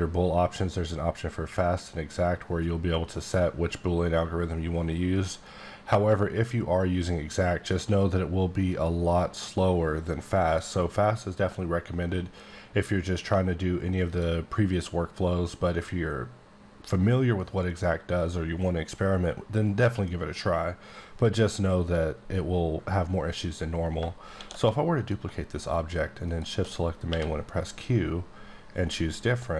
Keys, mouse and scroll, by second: 10.4 click, 14.1 click, 24.2 shift+d, 24.9 click, 27.0 q, 28.9 click.